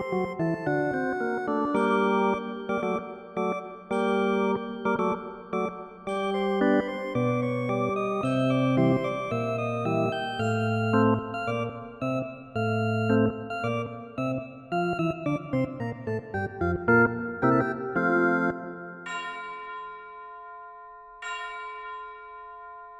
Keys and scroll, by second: 5.5 ctrl+-, 8.4 ctrl+z, 10.1 ctrl+z, 16.6 ctrl+z.